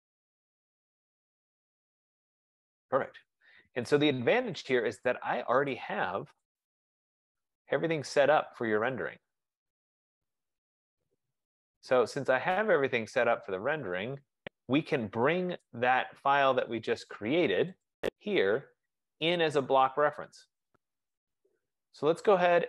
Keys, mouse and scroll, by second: 0.1 click, 6.1 click, 6.8 click, 7.5 click, 8.4 click, 9.1 click, 11.0 click, 15.4 click, 15.9 click, 18.6 click.